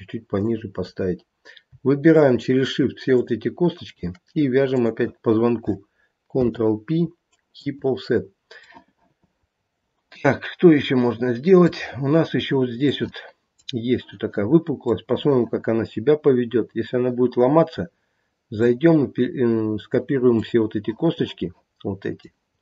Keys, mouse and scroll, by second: 2.1 shift+click, 3.1 shift+click, 6.2 ctrl+p, 8.7 middle click, 11.5 middle click, 13.1 middle click, 13.4-16.6 middle click, 18.6 scroll down 1, 20.3 scroll down 1, 20.4 middle click, 22.5-22.6 scroll up 2.